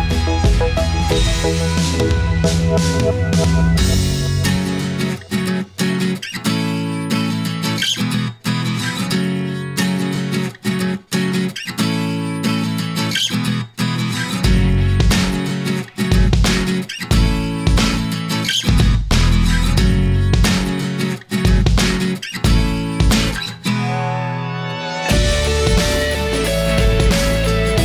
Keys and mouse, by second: 0.1-2.0 middle drag, 2.7-6.0 middle drag, 7.0-8.3 middle drag, 8.9 right click, 10.7-12.6 middle drag, 14.9-16.3 middle drag, 16.3-17.7 right drag, 18.2 right click, 20.0-21.5 drag, 22.1-23.2 drag, 25.4-27.7 middle drag.